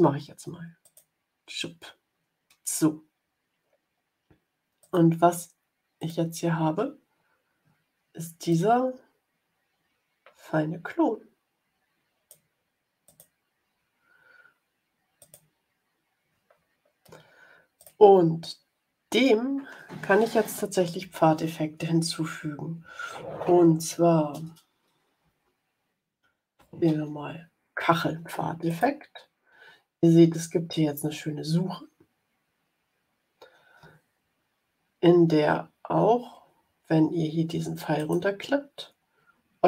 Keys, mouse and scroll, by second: 0.8 click, 4.7 click, 5.9 click, 8.4-12.4 drag, 13.0 click, 15.1 click, 17.7 click, 25.1-27.5 typing, 28.6 click, 37.9 click.